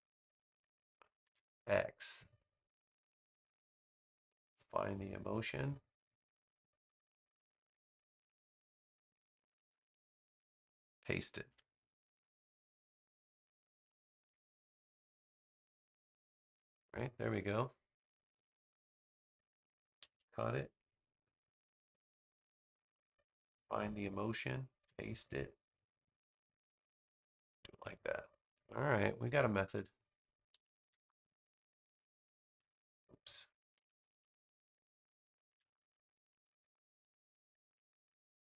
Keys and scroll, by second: 1.1 super+x, 11.4 super+v, 20.0 super+x, 24.7 super+v, 27.7 space, 30.7 super+x, 32.3 super+v, 33.6 super+z, 35.4 super+v.